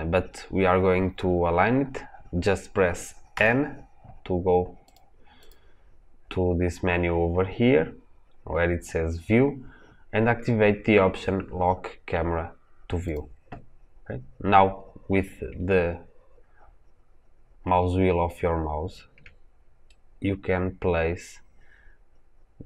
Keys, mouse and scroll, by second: 3.2 n, 12.9 click, 15.8 scroll down 1, 16.8-17.3 scroll up 1, 17.3-17.9 scroll down 1, 17.9-18.3 scroll up 1, 18.3-19.8 scroll down 1, 19.8-22.6 shift+middle drag.